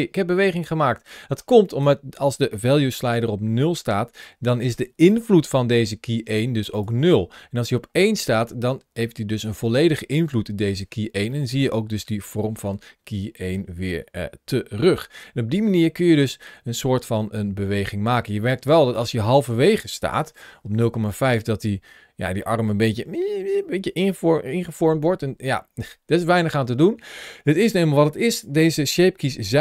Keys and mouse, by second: 6.7 click, 11.2-12.4 middle drag, 13.4-18.8 drag, 20.1 shift+middle click, 21.2-28.2 drag.